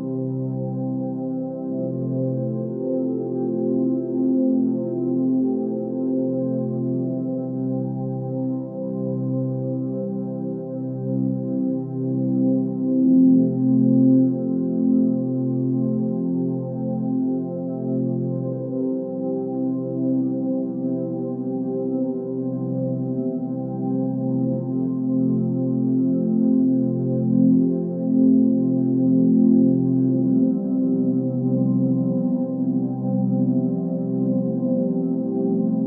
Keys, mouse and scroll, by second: 2.1-2.8 drag, 5.6-6.1 scroll down 2, 7.5-8.5 click, 9.4 scroll down 1, 10.5-12.4 drag, 13.4 space, 13.8 right click, 13.9 space, 14.1 click, 14.6 space, 15.0-15.6 ctrl+drag, 18.0-18.9 ctrl+drag, 20.5-22.1 drag, 22.6-24.0 drag, 24.1 space, 24.8 right click, 25.0 click, 25.5 space, 26.1 ctrl+click, 27.4-28.0 ctrl+drag.